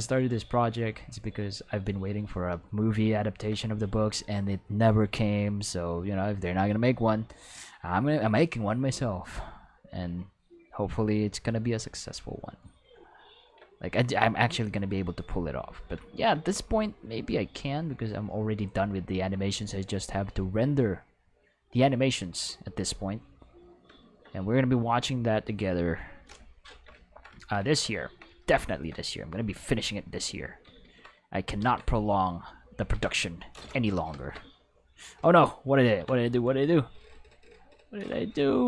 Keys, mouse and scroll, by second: 0.2 shift+middle click, 4.4 click, 5.6-6.6 drag, 8.8 click, 9.6-11.7 drag, 13.5 shift+middle click, 14.4-15.8 drag, 16.8-17.8 drag, 18.5 shift+middle click, 19.2 shift+middle click, 19.9-22.6 drag, 23.2 click, 24.6-26.1 drag, 29.5 click, 29.8 click, 30.6 ctrl+z, 30.8 ctrl+z, 31.6 ctrl+z, 32.2 click, 32.9 ctrl+z, 34.3 shift+z, 35.8 ctrl+z.